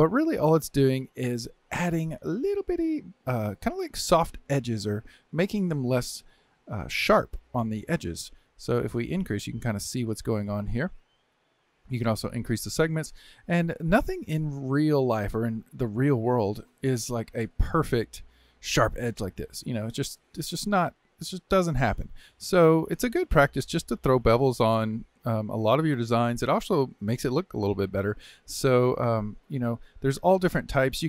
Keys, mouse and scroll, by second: 0.4-7.1 middle drag, 9.0-12.0 drag, 12.2-13.7 drag, 13.7 scroll down 2, 14.5-18.5 middle drag, 18.5 click, 19.9-23.0 middle drag, 23.0 click, 24.5-24.9 scroll up 2, 24.9-29.1 middle drag, 29.1 scroll down 1, 29.4-31.0 shift+middle drag.